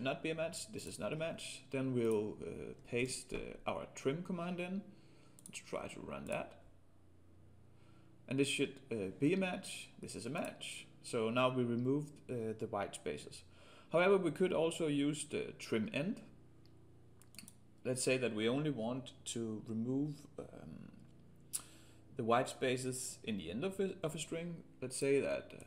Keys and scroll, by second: 3.0 ctrl+v.